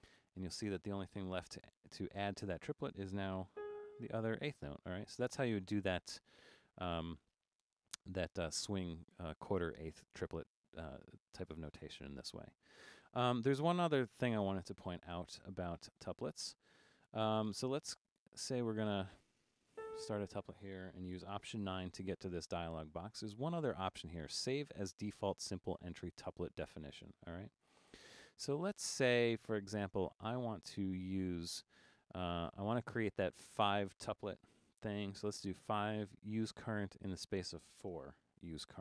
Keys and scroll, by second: 1.6 4, 3.6 g, 18.3 4, 19.5-20.2 typing, 21.7 alt+9, 35.3 5, 38.3 4.